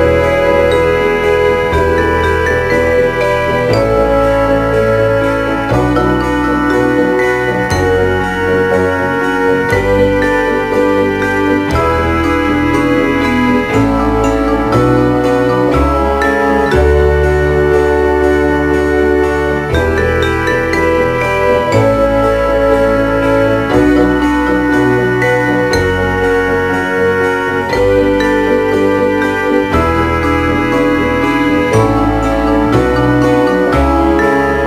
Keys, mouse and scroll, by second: 4.1 click, 8.0 right click, 9.3 r, 11.8 right click, 12.6 right click, 13.2 r, 16.7 right click, 19.5 click, 26.4 Delete, 28.4 right click, 29.0 Delete.